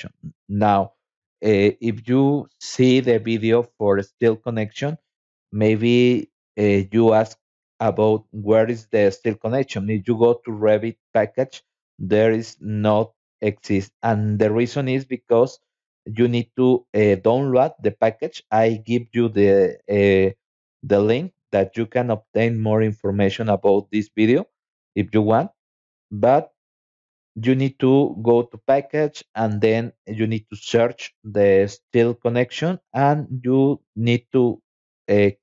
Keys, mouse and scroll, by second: 0.1 scroll down 2, 1.0-2.4 scroll down 8, 5.3-5.7 scroll down 2, 6.3-6.8 scroll up 2, 6.9 scroll up 2, 7.6 scroll up 2, 8.2 scroll up 2, 10.0 click, 10.7 click, 12.5 click, 13.8 click, 14.5 scroll up 2, 14.6 scroll down 1, 15.1 scroll up 2, 15.2 scroll down 1, 15.3 scroll up 2, 21.4 scroll down 2, 25.8 alt+Tab, 27.1 click, 27.9 click, 30.0 i, 34.2 click.